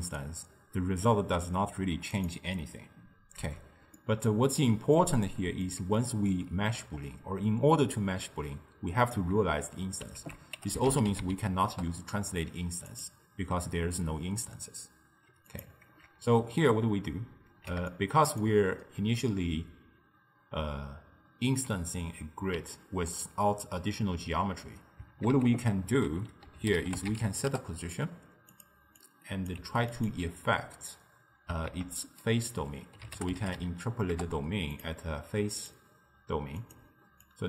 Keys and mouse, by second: 2.2 click, 3.5 x, 4.0-8.3 middle drag, 10.3 ctrl+a, 15.6 click, 16.0 ctrl+x, 17.0-21.1 ctrl+middle drag, 25.4 ctrl+a, 29.1 drag, 29.6 g, 31.8 ctrl+a, 35.6-37.3 drag.